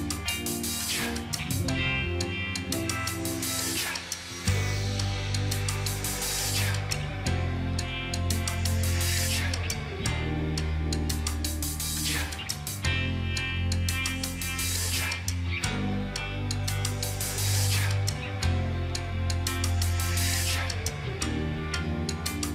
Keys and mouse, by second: 10.7 ctrl+click, 14.7 right click, 17.1 Right, 17.4 ctrl+t, 18.3 shift+click.